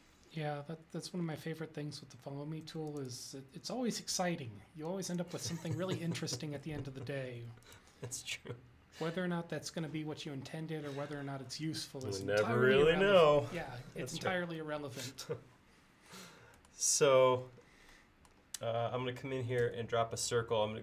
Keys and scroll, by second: 1.4 space, 2.8 space, 4.2 e, 7.5 space, 19.7 c.